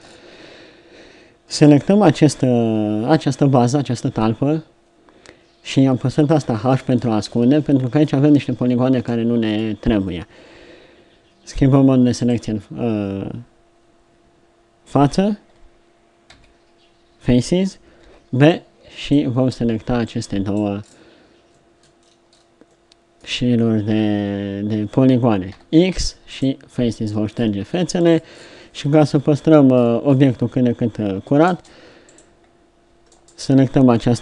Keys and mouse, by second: 4.1 l, 6.3 h, 16.3 z, 18.0 b, 19.6 b, 20.8-23.2 drag, 25.5 x, 27.4 middle click, 29.1 KP_7, 31.5 ctrl+Tab.